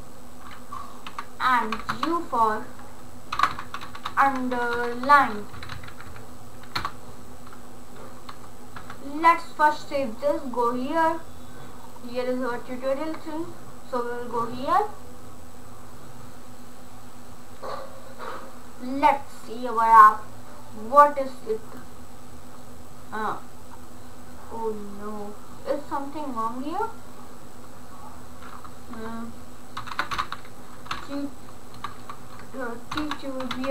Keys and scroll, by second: 1.1-5.4 typing, 5.5 Right, 6.8 Return, 8.8 ctrl+s, 29.5-31.8 typing, 32.9-33.7 typing.